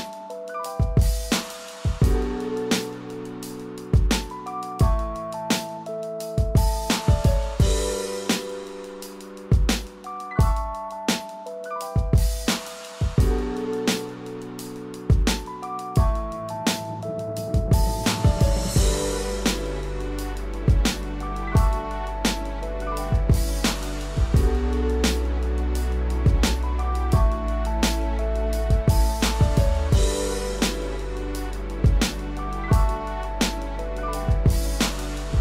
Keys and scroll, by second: 2.9 ctrl+-, 22.2 ctrl+=.